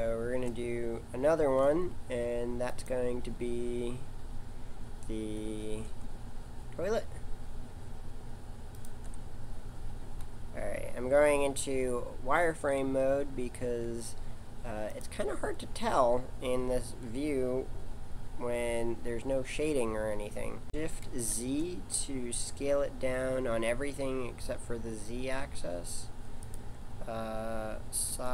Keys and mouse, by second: 0.6 middle click, 1.4 shift+a, 5.6 g, 10.0 z, 12.5 g, 18.4 z, 20.6 s, 28.1 s.